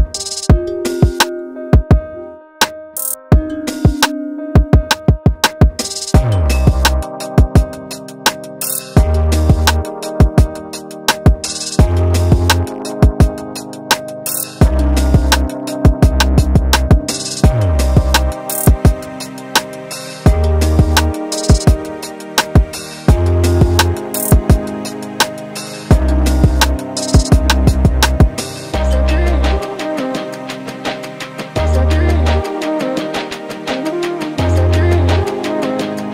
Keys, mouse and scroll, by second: 0.0 middle click, 0.2 Tab, 0.2 click, 0.5 Tab, 0.6 click, 1.0 l, 1.2 shift+s, 1.4 middle click, 1.5 scroll up 2, 1.6 shift+middle click, 1.7 middle click, 1.9 s, 2.2 x, 2.4 scroll down 7, 2.6-3.6 drag, 3.8 s, 4.1 scroll down 8, 4.2 KP_1, 4.3 shift+middle click, 4.6 click, 5.0 e, 5.4 scroll down 1, 5.4 middle click, 6.1 alt+click, 6.3 ctrl+e, 6.5 middle click, 6.6 scroll up 2, 6.7 shift+middle click, 7.1 alt+click, 7.2 middle click, 7.3 shift+middle click, 7.5 click, 7.8 x, 8.0 middle click, 8.2 x, 8.4 shift+middle click, 8.6 scroll down 3, 8.7 shift+middle click, 8.8 scroll up 3, 8.8 middle click, 9.3 click, 9.9 click, 10.4 middle click, 10.6 click, 11.3 ctrl+z, 11.3 middle click, 11.5 ctrl+z, 11.6 middle click, 12.4 middle click, 13.2 a, 13.3 alt+n, 13.5 middle click, 14.5 Tab, 14.6 Tab, 14.7 click, 15.2 shift+click, 15.5 x, 15.9 middle click, 16.1 Tab, 16.3 Tab, 16.3 Tab, 16.4 ctrl+z, 16.7 ctrl+middle click, 17.1 Tab, 17.3 middle click, 17.6 shift+click, 18.0 ctrl+j, 18.1 middle click, 18.2 Tab, 18.3 middle click, 18.6 middle click, 18.9 m, 19.0 middle click, 19.2 scroll down 3, 19.4 shift+middle click, 19.5 middle click, 19.7 click, 19.7 middle click, 20.3 click, 20.4 middle click, 21.2 Tab, 21.4 Tab, 21.4 middle click, 21.8 click, 22.0 shift+middle click, 22.0 shift+click, 22.2-28.9 typing, 22.4 scroll down 1, 22.4 shift+middle click, 23.5 click, 24.3 middle click, 25.4 scroll up 3, 25.4 shift+middle click, 25.5 alt+click, 26.1 middle click, 26.2 click, 26.8 middle click, 27.3 click, 28.1 click, 29.1 scroll up 3, 29.1 shift+middle click, 29.7 shift+middle click, 29.9 click, 30.6-31.9 typing, 30.8 middle click, 31.5 click, 32.1 middle click, 32.2 alt+click, 32.3 middle click, 32.4 ctrl+e, 32.7 alt+shift+click, 33.3 click, 33.6 alt+shift+click, 33.8 alt+shift+click, 34.2 ctrl+e, 34.3 middle click, 34.5 shift+click, 34.9 shift+click, 35.1 shift+click, 35.3 ctrl+e, 35.5 ctrl+e, 35.7 scroll down 2, 35.8 middle click.